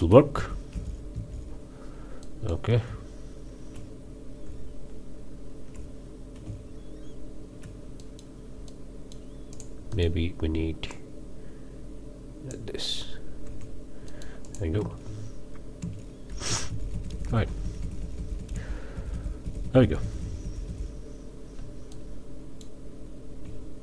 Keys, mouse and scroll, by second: 0.3 Right, 1.1 Left, 2.2-2.7 middle drag, 2.9 z, 4.5 Tab, 6.4 z, 8.0 middle click, 8.7-9.3 middle drag, 9.5 drag, 9.9-10.2 drag, 10.9-12.7 drag, 13.4 Tab, 14.1-14.8 drag, 14.8 space, 15.8 space, 16.9 Right, 21.9-22.6 middle drag, 22.6 drag, 23.4 z.